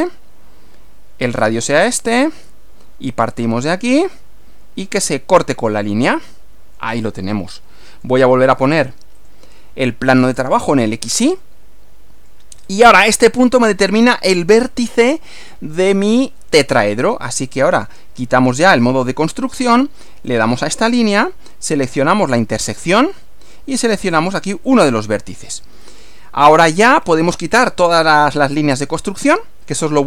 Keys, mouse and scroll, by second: 1.3 click, 3.1 click, 5.9 click, 6.9 scroll down 1, 7.4 middle click, 9.1 click, 10.5 click, 11.5-12.5 middle drag, 12.7 scroll up 1, 18.7 click, 20.3 click, 23.1 click, 24.7 click, 25.9-26.9 middle drag, 26.9-27.2 scroll down 1, 28.0 scroll down 2, 28.8 click.